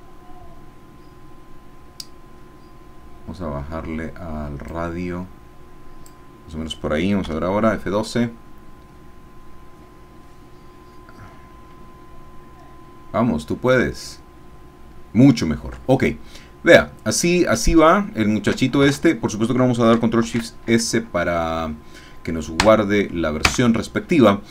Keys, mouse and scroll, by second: 4.7-6.2 drag, 7.4 F12, 16.5-17.5 scroll down 2, 17.9 shift+middle click, 18.9 alt+shift+Tab, 20.3 ctrl+shift+s, 22.6 KP_Add, 23.5 KP_Enter.